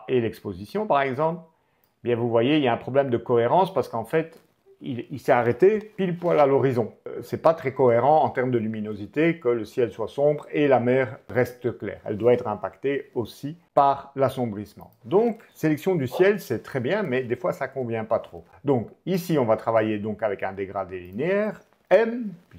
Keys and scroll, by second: 15.9 BackSpace, 21.8 m.